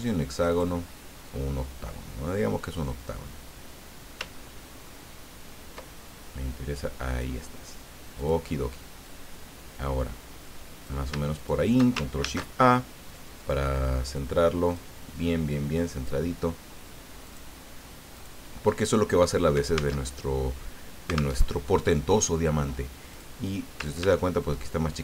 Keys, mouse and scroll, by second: 0.3 click, 2.9-7.6 drag, 8.1 click, 9.0-11.1 drag, 11.3 shift+click, 12.2 ctrl+shift+a, 13.4 click, 14.6 click, 15.9 click, 17.2 click, 18.1 click, 20.0 alt+Tab, 21.4 alt+Tab, 23.1 click, 24.4-25.0 ctrl+shift+drag.